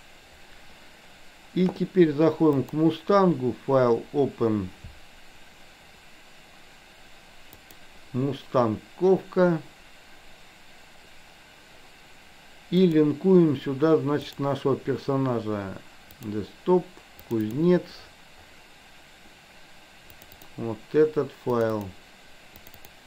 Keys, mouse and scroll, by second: 2.6-10.3 drag, 13.0-14.7 drag.